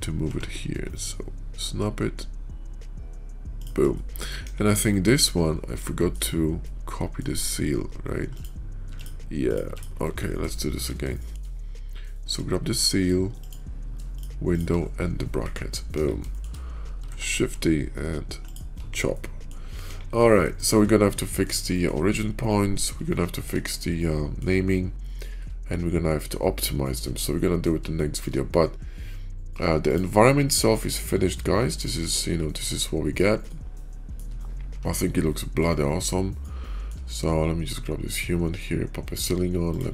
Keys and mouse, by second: 0.7 KP_5, 0.7 g, 3.8-4.2 middle drag, 4.3 KP_5, 4.8 middle drag, 5.7-6.0 middle drag, 6.5 middle click, 8.7 x, 9.3 click, 9.6 x, 10.4 shift+click, 11.0 shift+middle drag, 12.0 shift+middle drag, 13.3-13.9 drag, 15.8 KP_5, 16.2 shift+drag, 17.1 shift+d, 19.0-19.4 middle drag, 19.7 KP_5, 20.4 shift+middle click, 21.1 middle drag, 21.6 shift+middle drag, 22.9-23.4 shift+middle drag, 23.9-24.3 middle drag, 24.9-25.3 shift+middle drag, 26.8-27.6 middle drag, 27.8 shift+middle click, 29.8 click, 30.4-30.9 middle drag, 31.7-32.0 shift+middle drag, 32.7-33.0 middle drag, 33.3-34.1 shift+middle drag, 35.2 middle click, 35.7-36.8 shift+middle drag, 39.6 click.